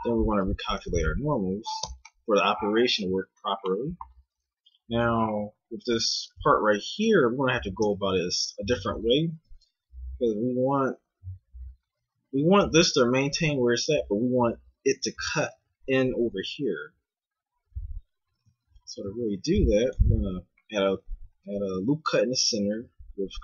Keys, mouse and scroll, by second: 0.4 ctrl+n, 1.0 a, 1.9 Tab, 7.0 KP_1, 7.8 Tab, 8.4 z, 19.0 ctrl+r.